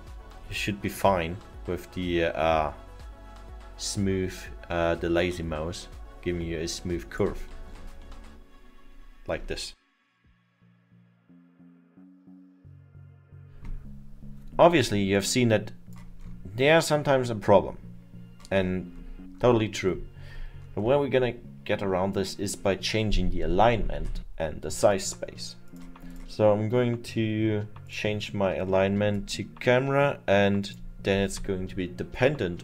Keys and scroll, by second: 13.8 ctrl+z.